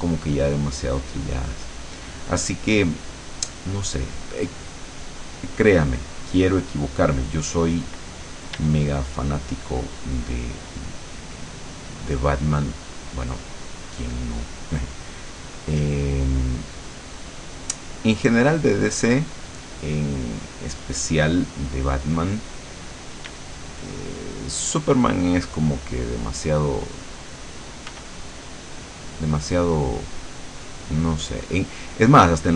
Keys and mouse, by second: 3.3-4.3 drag, 5.3 click, 6.2 click, 7.1 click, 8.7 d, 9.4 click, 15.9-22.2 drag, 23.2 click, 23.4 d, 23.7-28.0 drag, 28.0 f, 28.3-32.5 drag.